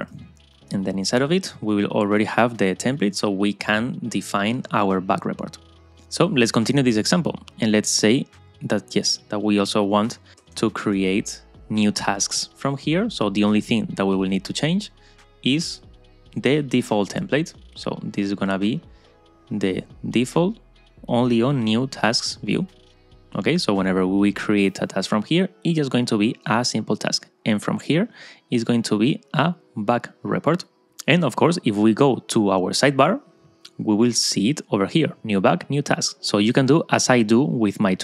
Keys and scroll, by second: 11.5 Return.